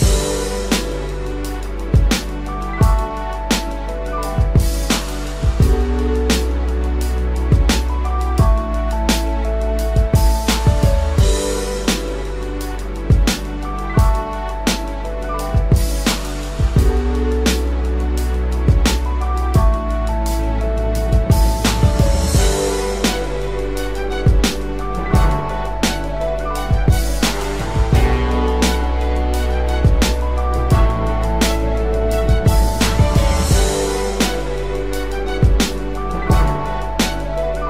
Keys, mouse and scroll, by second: 9.5 double click, 18.9-19.4 typing, 27.1 double click.